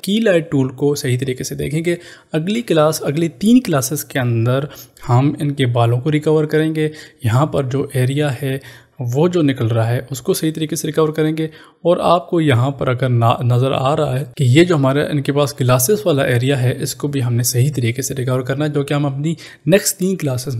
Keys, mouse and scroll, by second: 12.3 click.